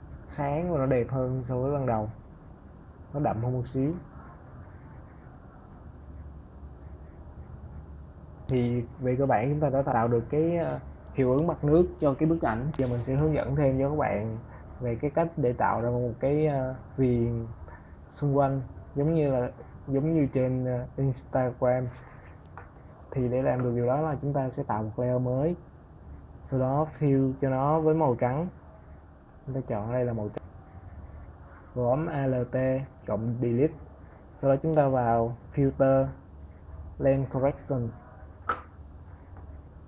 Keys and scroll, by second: 31.8 alt+Delete.